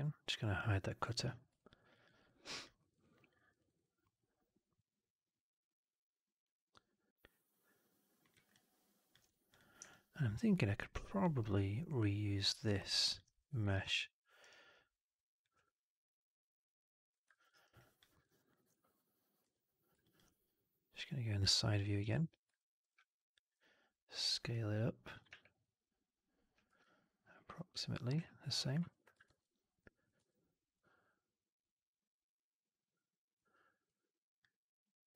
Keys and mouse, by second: 1.1 click, 1.5 alt+drag, 1.8 alt+middle drag, 2.0 alt+right drag, 2.2-2.5 alt+drag, 2.7 alt+middle drag, 2.8 alt+right click, 3.0 alt+right click, 3.3 alt+middle drag, 3.5 alt+right drag, 3.6 alt+right drag, 3.9-8.2 alt+middle drag, 8.4-9.0 alt+drag, 9.4 click, 9.8-12.3 alt+drag, 12.5 alt+middle drag, 12.7 alt+right drag, 12.9 alt+drag, 14.0 ctrl+d, 15.4-17.0 drag, 17.2 alt+middle click, 17.4 alt+right click, 17.7 alt+click, 18.0 alt+middle click, 18.1 alt+right click, 18.4 alt+click, 19.3 r, 19.9 click, 21.3 click, 22.0 click, 22.5 alt+middle click, 25.2 w, 26.6 r, 28.0 w, 28.9 1, 29.2 shift+x, 29.7 click, 30.1 w, 30.7-33.3 drag, 33.8 click, 35.0-35.1 drag.